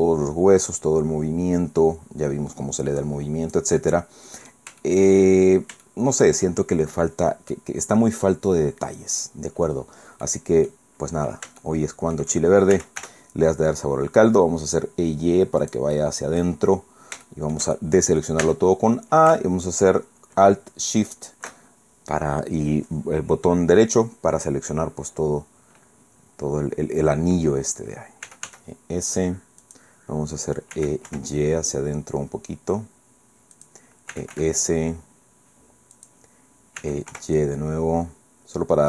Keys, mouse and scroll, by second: 0.8-3.7 drag, 3.8 middle click, 4.8 shift+middle click, 5.4 shift+scroll up 1, 5.6 scroll down 1, 5.8 shift+middle click, 7.5 click, 10.2 click, 11.6 shift+click, 12.7 shift+e, 13.0 y, 15.6 click, 16.0 click, 16.8 middle click, 17.2 shift+click, 18.1 click, 21.1 alt+shift+right click, 28.2 e, 28.4 s, 29.6 click, 30.7 e, 31.1 y, 33.6 click, 34.1 e, 34.3 s, 36.0 click, 36.8 e, 37.1 y.